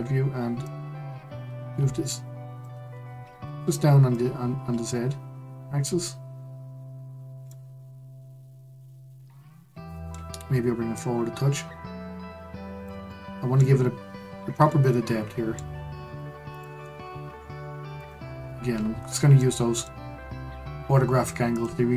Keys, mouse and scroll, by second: 0.6 click, 3.3 ctrl+z, 4.1 click, 6.2-7.0 scroll down 3, 7.5-10.5 middle drag, 10.9 click, 13.1-16.5 middle drag, 16.5 click, 17.9 click, 18.4-19.0 scroll up 1, 19.0-19.3 scroll down 2, 19.3-21.5 middle drag, 21.5 click.